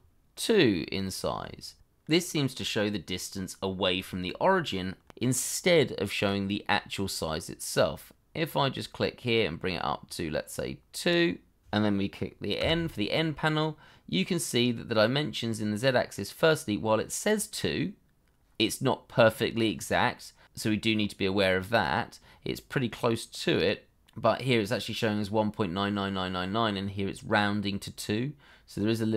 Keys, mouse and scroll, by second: 2.1 ctrl+z, 12.0 scroll down 1, 12.5 n.